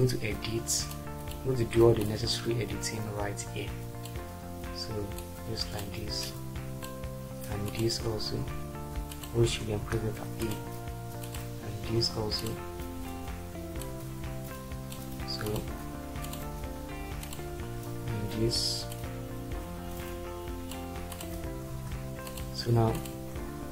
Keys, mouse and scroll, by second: 9.8 e, 22.1 e.